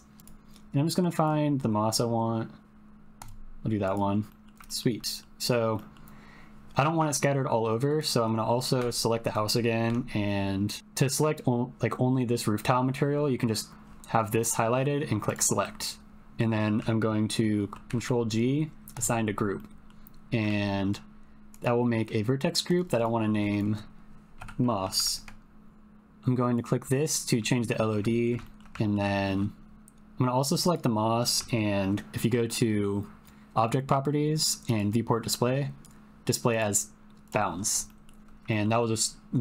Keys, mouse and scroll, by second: 4.3 middle click, 4.6 shift+middle click, 5.0 middle click, 5.7 middle click, 7.8 click, 8.8 Tab, 15.8 click, 16.1 middle click, 17.8 ctrl+g, 19.5 middle click, 20.5 Tab, 21.5 click, 22.8-25.7 drag, 24.9 s, 26.5 click, 27.7 shift+middle click, 28.2 ctrl+middle click, 28.5 shift+middle click, 28.8 ctrl+middle click, 29.1 shift+middle click, 34.7 click, 35.1 middle click, 36.5 click, 37.8 middle click, 38.5 shift+middle click, 38.8 middle click.